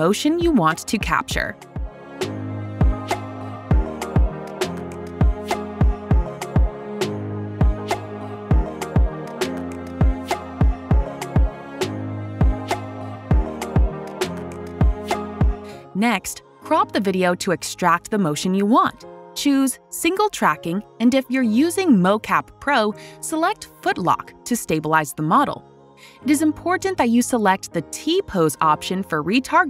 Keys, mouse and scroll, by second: 0.2 click, 5.1 click, 11.3 click, 14.0 click, 16.7 click, 17.2 click, 22.0 click, 23.6 click, 25.0 click, 26.9 click, 29.2 click.